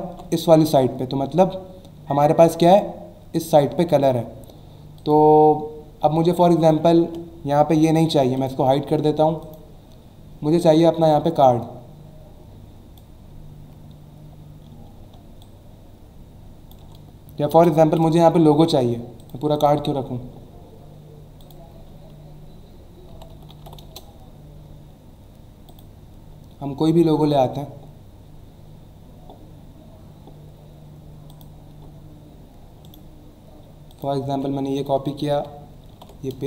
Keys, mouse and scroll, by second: 5.0 click, 6.3 click, 6.9 ctrl+z, 8.3 click, 10.6 click, 15.4 alt+shift+click, 17.5 Return, 17.9 Delete, 19.2 click, 21.4 click, 23.1-24.1 typing, 25.7 click, 29.5-30.0 scroll down 2, 31.3 click, 32.8 right click, 33.9 click, 34.2 alt+Tab, 34.8 click.